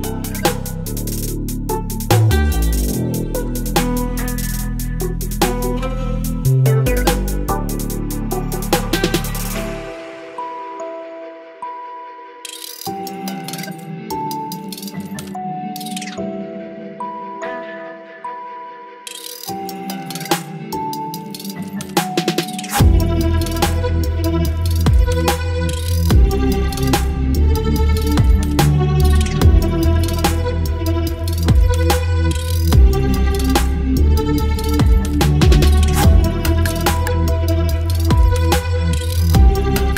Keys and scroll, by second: 1.4 Return, 1.5 space, 1.7 space, 2.3 ctrl+t, 4.2 Return, 6.5 Return, 6.9 space, 7.2 Up, 7.5 space, 8.7 space, 9.6 space, 10.2 ctrl+t, 11.3 Return, 12.8 space, 14.0 ctrl+BackSpace, 15.2 ctrl+BackSpace, 16.0 ctrl+BackSpace, 16.5 v, 16.7 ctrl+t, 16.9 Return, 17.3 ctrl+z, 17.8 ctrl+t, 18.6 Return, 19.1 ctrl+t, 19.6 Return, 19.8 Up, 19.8 Up, 22.0 Return, 22.6 space, 25.5 ctrl+t, 26.7 Return, 27.2 space, 28.2 space, 29.8 space, 31.4 ctrl+BackSpace, 31.9 space, 33.6 Delete, 34.3 Delete, 34.8 Delete, 35.5 Delete, 36.4 Delete, 37.7 Delete, 39.4 Delete.